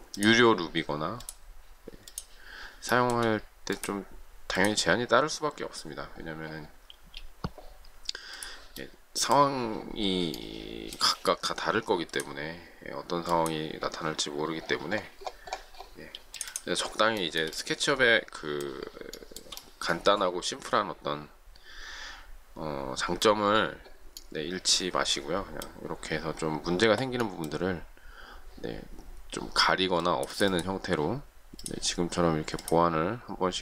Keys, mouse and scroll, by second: 2.9 shift+middle click, 6.9 space, 16.1 space, 17.1 shift+middle click, 19.1 shift+middle click.